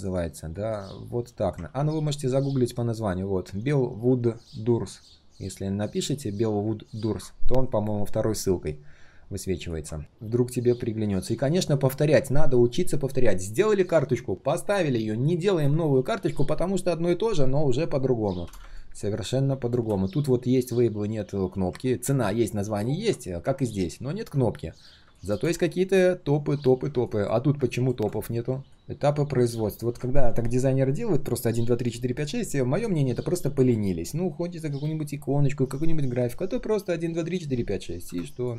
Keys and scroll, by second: 1.6 ctrl+c.